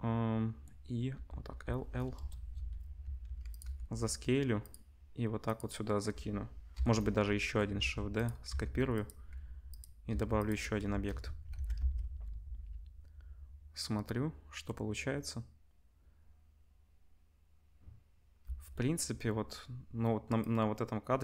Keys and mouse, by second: 1.1-3.6 typing, 5.4 click, 6.7 l, 7.7-11.8 typing, 9.1-14.1 drag, 11.0 Tab, 11.5 ctrl+s, 14.1-20.4 middle drag, 18.4 space, 20.4-21.2 drag.